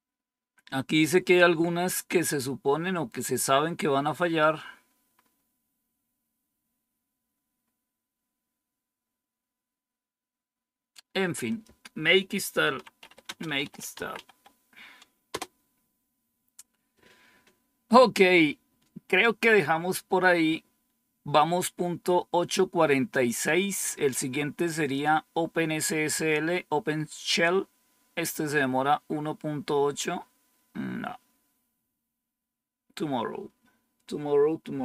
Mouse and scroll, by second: 5.0-5.7 scroll up 2, 5.7-6.6 scroll down 3, 6.6-7.5 scroll down 1, 7.5-8.5 scroll up 3, 9.0 scroll down 2, 11.4 click, 24.7 click, 29.9-31.7 scroll down 3, 31.9-32.8 scroll down 2.